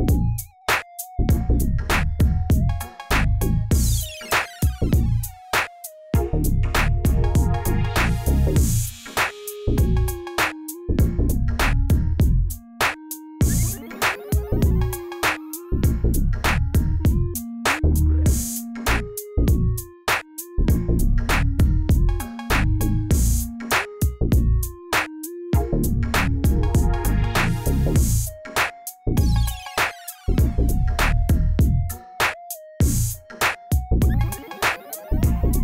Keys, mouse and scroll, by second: 1.2 click, 1.4 Tab, 1.6 click, 1.8 middle click, 2.6 drag, 3.1 g, 4.5 click, 4.9 middle drag, 5.1-5.8 scroll down 8, 6.1-7.6 middle drag, 7.8 scroll down 3, 7.9-8.4 middle drag, 8.4 KP_1, 9.0 scroll down 2, 9.1 scroll up 1, 9.3-9.7 scroll down 1, 9.7 shift+a, 11.2 s, 12.3 g, 13.4 scroll up 1, 13.6-14.0 shift+middle drag, 14.0 scroll up 2, 14.9 s, 16.0-16.7 middle drag, 16.7 click, 18.2 click, 18.3 Tab, 18.8 click, 19.3 Delete, 19.8 middle click, 20.2 click, 20.5 Delete, 21.7 click, 22.0 middle click, 22.4 KP_1, 24.0 click, 24.7 g, 26.6 click, 27.5 g, 28.9 click, 29.5 g, 31.9 Tab, 32.1 click, 32.4-34.0 drag, 34.3-35.4 drag.